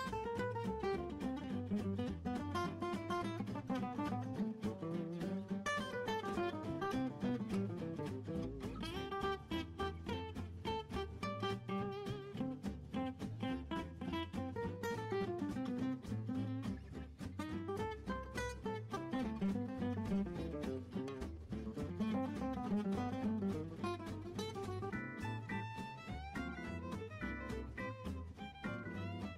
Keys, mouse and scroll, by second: 16.5 scroll down 2, 16.7-19.4 scroll up 4, 19.4 click, 21.6-23.7 scroll up 2, 23.7 click, 25.9 click, 27.3 scroll up 1, 27.6 middle click, 28.0-28.5 scroll up 2, 28.5 scroll down 3, 28.7-29.3 middle drag.